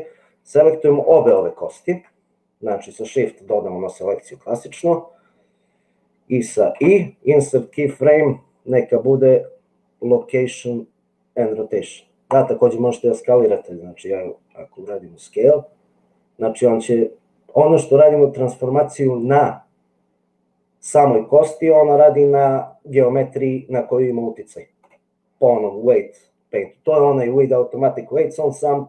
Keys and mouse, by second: 1.2 shift+click, 6.9 i, 14.9 s.